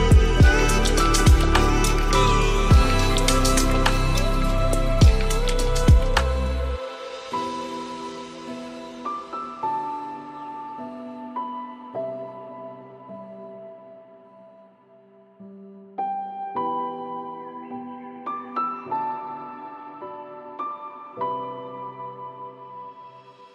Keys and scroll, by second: 18.4 ctrl+alt+s.